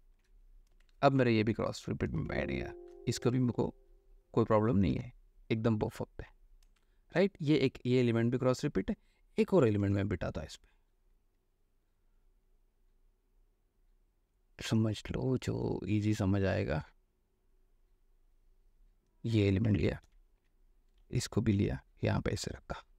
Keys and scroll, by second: 0.3 ctrl+shift+e, 1.0 space, 2.3 alt+space, 6.8 space, 10.0 ctrl+o, 20.0 ctrl+a, 20.2 ctrl+c, 20.5 ctrl+w, 21.2 ctrl+v, 21.7 ctrl+v.